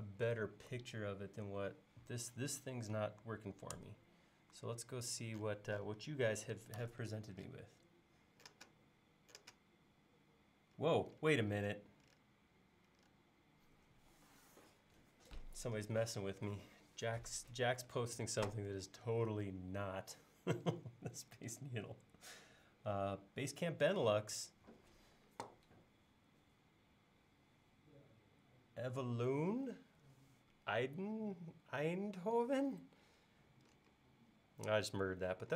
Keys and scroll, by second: 3.8 super+Tab.